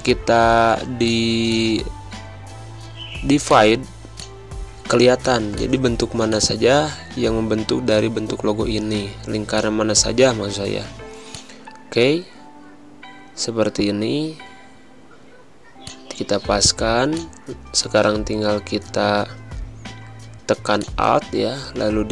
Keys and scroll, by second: 0.9 space, 2.2 v, 2.7 z, 3.6 space, 4.3 v, 13.2 Right, 13.2 Down, 15.6 space, 19.0 ctrl+c, 19.3 ctrl+f.